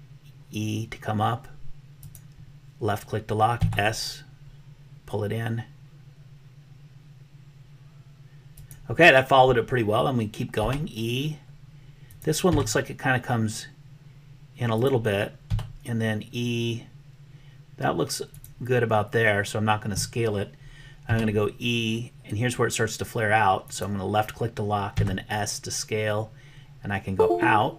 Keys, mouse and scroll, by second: 3.7 s, 10.7 e, 12.6 s, 15.4 e, 21.0 e, 25.1 s.